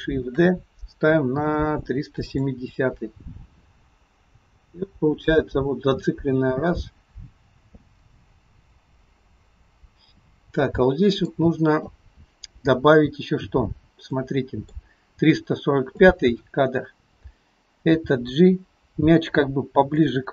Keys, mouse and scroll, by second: 0.4 shift+d, 3.6 click, 12.5-14.2 scroll up 2, 14.2 middle click, 16.2 click, 18.0 g.